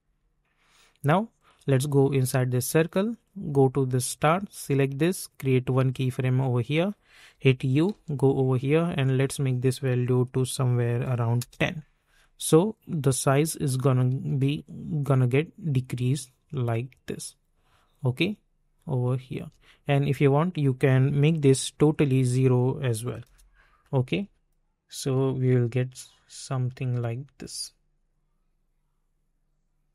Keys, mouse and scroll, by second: 0.0 space, 1.3 click, 4.5 s, 5.8 click, 7.3-8.4 typing, 9.2 click, 10.5 1, 11.3 Return, 12.2 click, 14.2 space, 19.3 space, 20.1 click, 21.2 k, 22.5 click, 23.2 Return, 24.1 click, 25.3 space, 27.9 -.